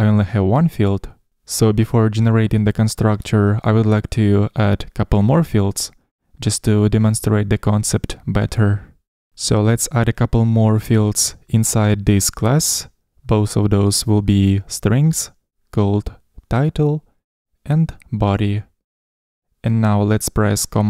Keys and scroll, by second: 14.1 Escape, 15.4 ctrl+alt+i, 18.5 Escape.